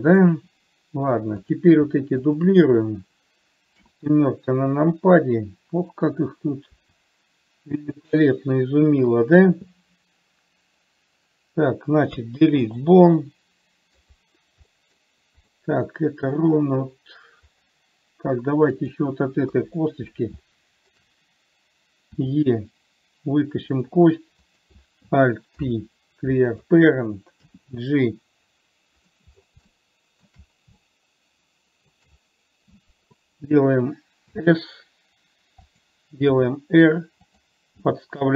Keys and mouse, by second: 1.8 click, 2.6 shift+click, 4.2 KP_7, 7.1 r, 12.5 Delete, 13.5 middle click, 15.1 middle click, 16.0 middle click, 19.1 click, 19.8 KP_3, 20.8 shift+middle click, 22.6 e, 25.0 click, 26.0 alt+p, 27.7 g, 30.0 shift+middle click, 31.1-32.2 shift+middle drag, 34.6 s, 36.6 r, 38.2 g.